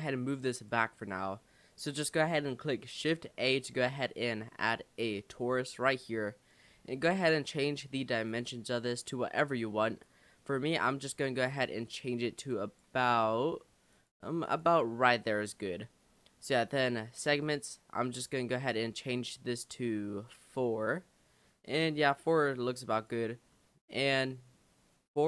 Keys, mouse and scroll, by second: 1.0 click, 1.4-3.3 middle drag, 3.3 shift+a, 6.7-7.3 scroll up 4, 7.3-8.3 middle drag, 8.3-13.1 drag, 13.9-20.0 drag, 20.0-23.0 middle drag, 23.0 click, 23.5-25.2 middle drag.